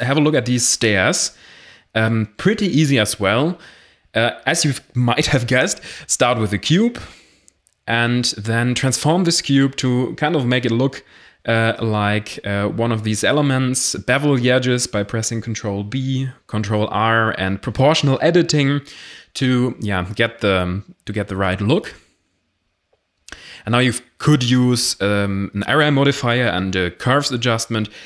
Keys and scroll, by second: 2.7 h, 2.8 Tab, 4.4 shift+s, 5.2 Tab, 5.9 shift+a, 7.9 s, 10.3 s, 10.6 x, 11.0 s, 11.2 z, 11.7 ctrl+a, 12.0 Tab, 13.4 Tab, 13.8 ctrl+r, 14.5 alt+2, 15.4-16.3 typing, 16.9 Tab, 19.5 7, 21.0 z, 23.1 g, 26.4-28.0 typing.